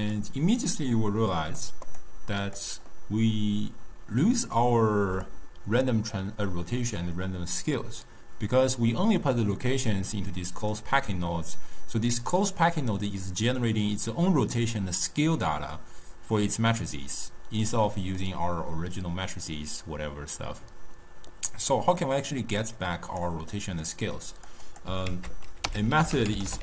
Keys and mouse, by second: 0.7-1.9 middle drag, 1.9 click, 2.5 click, 3.0-6.0 middle drag, 10.2-13.2 drag, 17.9-20.9 middle drag, 21.3-22.6 middle drag, 22.6 click, 23.6 middle click, 24.2 click, 24.7 click, 25.1 ctrl+a, 26.0 f.